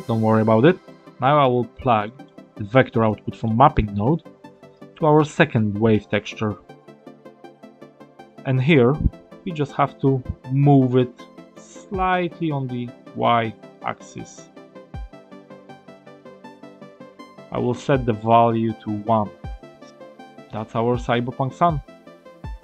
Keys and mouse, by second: 0.8 middle click, 1.9 middle click, 2.9 middle click, 4.7-8.0 drag, 9.2 middle click, 12.0-18.9 drag, 19.7-21.5 middle drag.